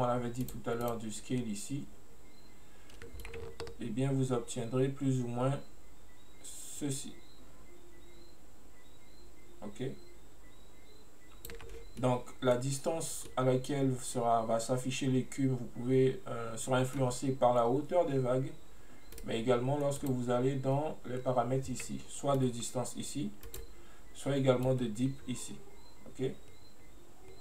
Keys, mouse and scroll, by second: 0.5 click, 0.9 click, 3.3-6.3 drag, 12.1-13.1 middle drag, 13.1 scroll up 1, 13.3 scroll down 1, 13.4-16.3 middle drag, 19.2 right click, 20.1 click, 22.4-23.6 drag, 24.8-27.4 drag.